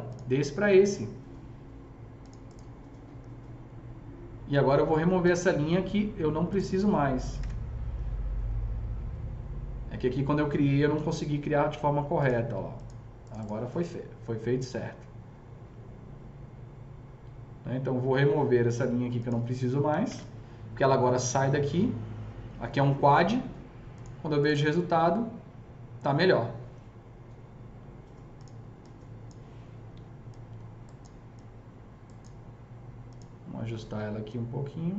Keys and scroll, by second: 7.3 ctrl+BackSpace, 10.9 alt+c, 11.7 s, 20.0 ctrl+BackSpace, 29.9 s.